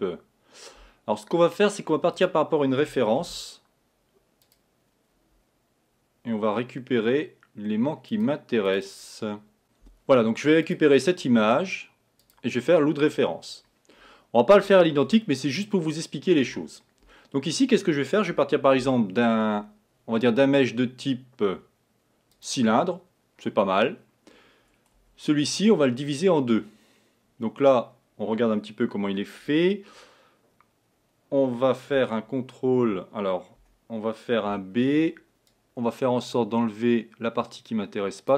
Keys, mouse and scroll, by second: 3.3 shift+a, 13.6-14.0 scroll up 5, 14.3-15.3 scroll down 2, 15.3-18.3 middle drag, 18.8 shift+a, 25.0 Tab, 25.5 scroll up 2, 27.5-30.0 scroll down 1, 33.6 a, 34.7 b.